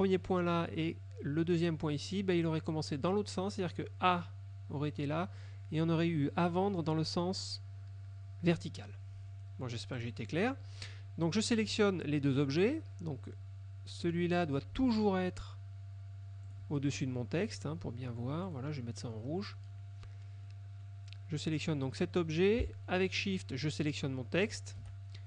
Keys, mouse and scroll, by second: 10.1 click, 14.2 click, 14.9 ctrl+z, 16.6 click, 18.6 click, 19.2 middle click, 20.6 middle click, 23.9 shift+click.